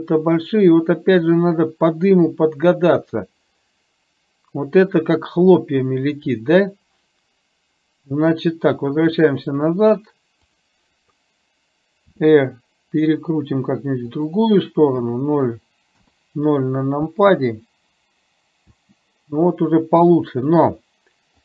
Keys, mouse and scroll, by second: 0.3 click, 9.2 click, 12.3 r, 15.2 KP_0, 16.0 KP_0, 17.0 space, 18.9 space.